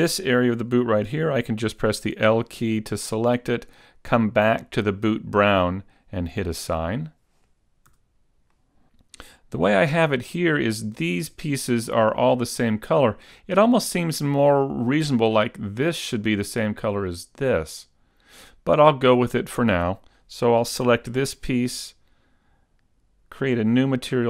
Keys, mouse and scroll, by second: 2.1 l, 4.5 click, 6.2 click, 8.0 a, 8.6 middle click, 21.0 l, 23.9 click.